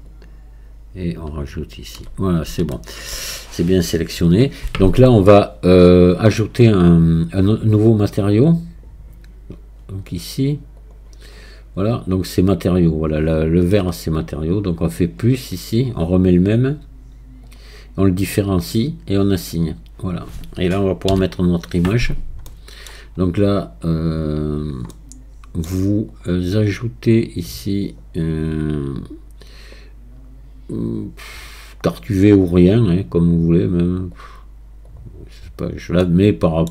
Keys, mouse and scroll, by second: 0.1-2.2 shift+drag, 2.2 scroll down 1, 2.7-5.7 shift+middle drag, 8.2-8.8 scroll up 4, 8.9 scroll down 1, 10.7 scroll down 1, 10.8 click, 11.3 scroll up 1, 15.0-21.3 drag, 21.3-22.5 scroll down 10, 22.5-23.5 middle drag, 23.5-24.9 drag, 24.9-26.1 middle drag, 26.1-30.9 drag, 34.1-36.0 drag, 36.0-36.7 middle drag.